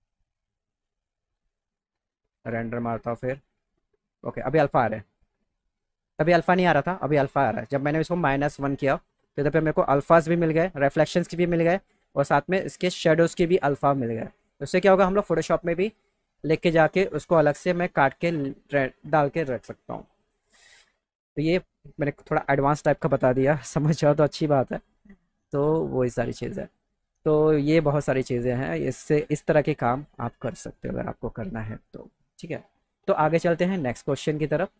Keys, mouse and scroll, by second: 1.3 click, 2.3 click, 20.6 click, 25.7 click, 26.4 click, 27.9 click, 34.4 click.